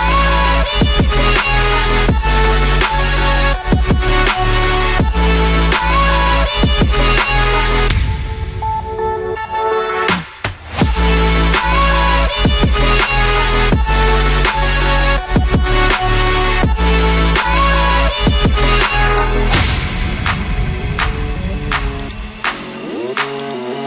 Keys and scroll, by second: 6.7 0.